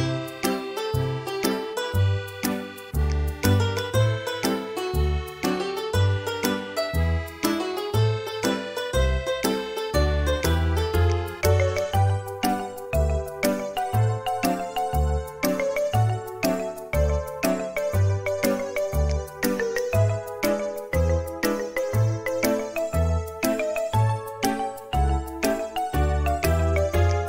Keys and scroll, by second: 6.0 r, 9.1 space, 12.0 Delete, 22.5 space, 24.6 m.